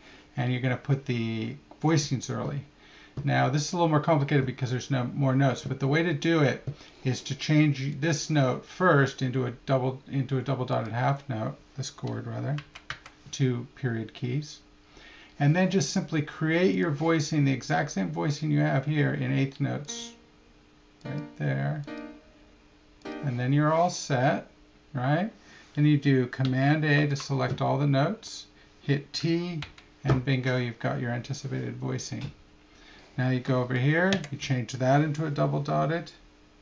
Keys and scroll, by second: 27.0 super+a, 34.1 Right.